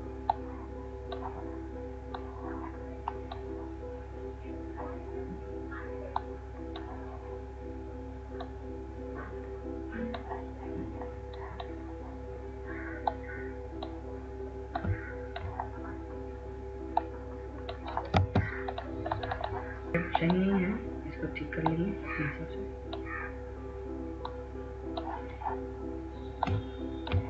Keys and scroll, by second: 18.5 ctrl+space.